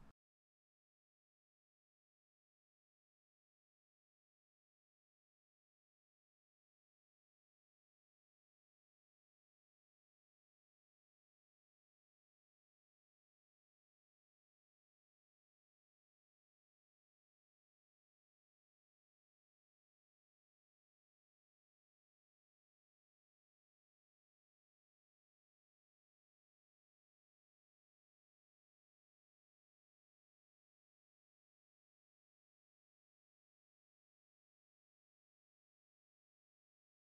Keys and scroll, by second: 3.5 a, 7.6 Delete, 13.5 space, 14.4 a, 17.5 space, 27.2 space, 30.0 space, 31.6 space, 35.7 space.